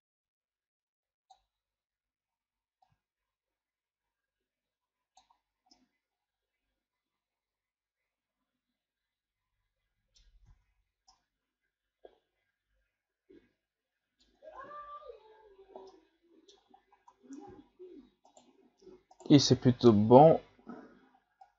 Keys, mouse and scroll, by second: 2.8-5.7 drag, 5.7-10.5 middle drag, 10.5 Tab, 11.1-14.4 middle drag, 14.4 Tab, 15.6-15.9 scroll down 2, 15.9-16.8 middle drag, 16.8 scroll up 4, 17.1 Tab, 17.6-18.3 scroll up 1, 18.3 right click, 19.1 shift+right click, 19.4-21.4 middle drag, 21.4-21.5 drag.